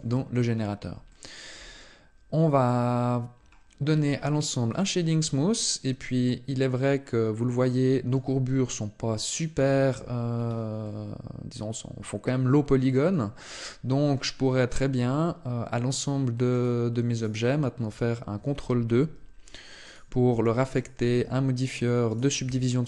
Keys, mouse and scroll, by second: 0.1-0.8 scroll up 4, 0.9 shift+middle click, 3.1-4.5 scroll up 4, 4.5 click, 5.4 middle click, 8.2 middle click, 9.4 shift+middle click, 10.1 scroll up 2, 10.6 middle click, 13.3 middle click, 16.3 right click, 16.9 right click, 18.7 ctrl+2, 19.6 right click, 20.1 ctrl+2, 20.5 right click, 21.0 ctrl+2, 21.9 right click, 22.2 ctrl+2.